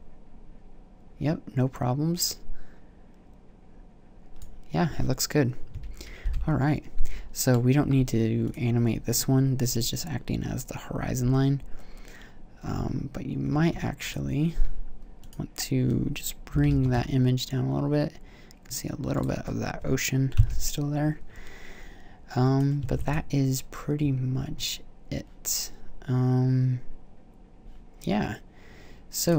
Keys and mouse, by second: 6.9 shift+Left, 9.9-11.4 middle drag, 14.5-16.7 drag, 16.7 g, 19.4-20.3 drag, 20.6 KP_0, 23.1 ctrl+s.